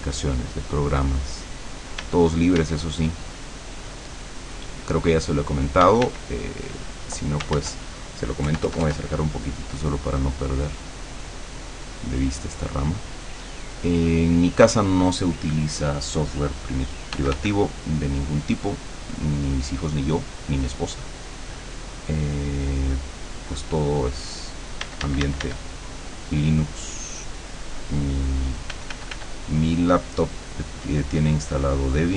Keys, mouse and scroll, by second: 2.0 d, 2.9-6.0 drag, 5.9 d, 6.6 click, 7.6 ctrl+z, 8.5 KP_Add, 10.4-14.8 drag, 17.2 f, 17.8-28.6 drag, 24.9 d, 28.8 f, 29.3-32.1 drag.